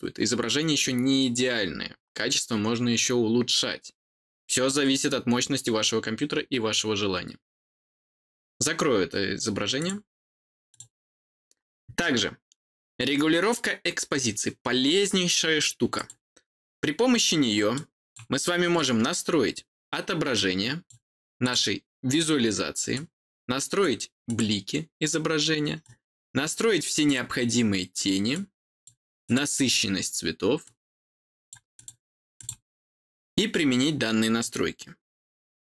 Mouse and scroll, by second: 0.0-2.5 scroll down 1, 2.5-7.8 scroll down 1, 7.8-9.7 scroll down 1, 9.7 click, 10.7 click, 15.9 click, 17.7 click, 18.7 click, 20.3 click, 21.4 click, 22.9 click, 24.2 click, 25.8 click, 27.0 click, 28.3 click, 29.2 click, 30.6 click, 31.7 click, 32.3 click.